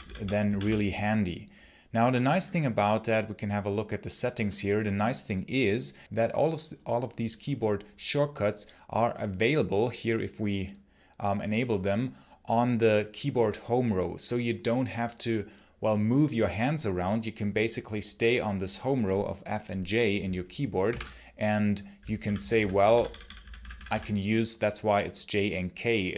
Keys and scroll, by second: 0.0-0.9 typing, 20.4-23.2 typing.